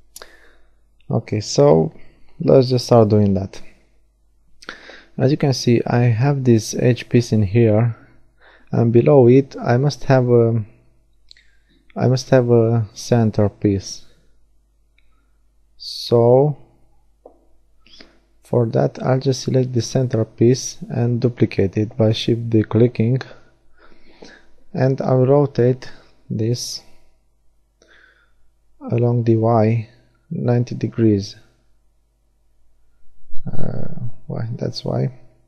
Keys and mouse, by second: 3.5-5.1 right drag, 5.1 middle click, 5.9 g, 6.4 click, 7.3 right click, 7.9-8.9 drag, 18.7-20.2 right drag, 20.2 middle click, 20.4 shift+d, 24.0 KP_1, 28.5 r.